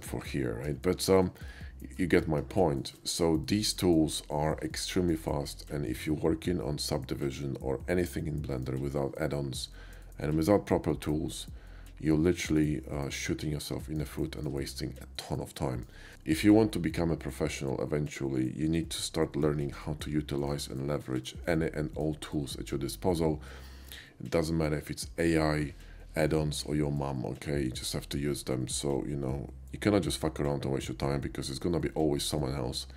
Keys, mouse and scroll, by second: 0.7 KP_5, 1.4 middle click, 2.6 KP_5, 2.8 shift+middle click, 3.1 shift+KP_5, 3.5 middle click, 4.0 middle click, 4.7 shift+middle click, 5.3 shift+middle click, 5.8-8.7 shift+middle drag, 10.1-12.6 middle drag, 13.0-14.0 middle drag, 14.3 shift+middle click, 14.7 shift+middle click, 19.1 shift+middle click, 19.8 shift+middle click, 20.8 shift+middle click, 21.3 shift+middle click.